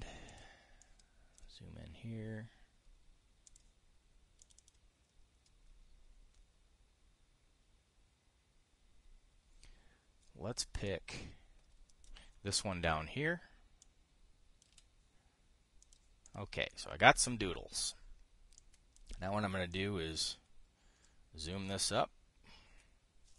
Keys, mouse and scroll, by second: 0.3 drag, 1.0 drag, 1.5 click, 4.2 click, 5.1 click, 11.6-12.8 drag, 13.3 Delete, 14.5 click, 15.4 Delete, 16.5 click, 17.0 click, 19.3 click, 20.4-22.5 ctrl+drag, 22.6-23.3 drag.